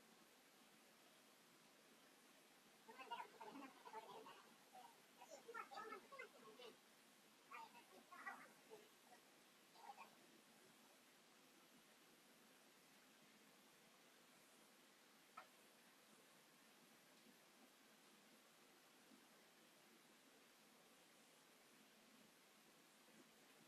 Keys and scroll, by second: 5.3 space, 5.4 Escape, 5.8 space, 6.4 Escape, 11.7 space, 11.9 Escape, 14.2 space.